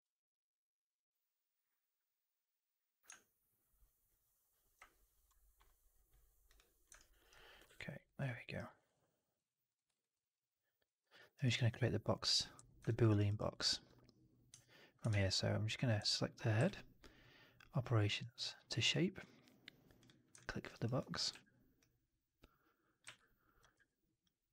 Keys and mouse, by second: 6.9 alt+right drag, 7.1 alt+right drag, 7.2 alt+drag, 7.5 alt+q, 7.8 alt+right drag, 8.1 alt+right click, 8.2 alt+drag, 8.5 alt+right drag, 8.7 alt+right drag, 8.8-9.3 alt+drag, 9.8 alt+right drag, 10.0-10.7 alt+drag, 10.9 alt+middle drag, 11.0 alt+right drag, 11.2 alt+right drag, 11.4 alt+drag, 12.8 drag, 13.0 right drag, 13.2 right drag, 13.4 drag, 15.0 shift+Tab, 16.0-16.3 drag, 16.5 q, 20.3 alt+drag, 20.6 alt+right drag, 20.9 alt+click, 22.9 r, 22.9 w, 23.6 r, 24.2 click.